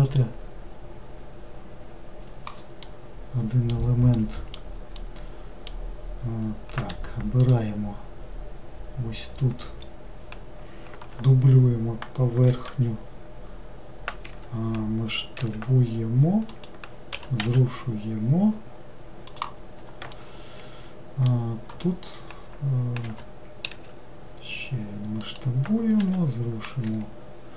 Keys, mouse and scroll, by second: 2.9-7.5 middle drag, 7.5 click, 9.6-10.7 scroll up 2, 10.7-12.6 scroll up 1, 12.6 shift+d, 15.5 s, 17.2 g, 20.2-23.1 shift+middle drag, 23.1 g, 26.1 g.